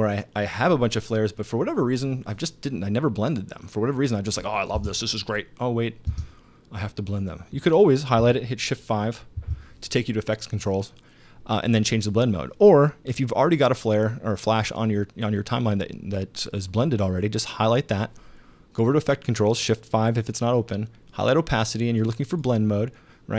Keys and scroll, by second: 4.8 space, 6.1 space, 9.4 shift+5.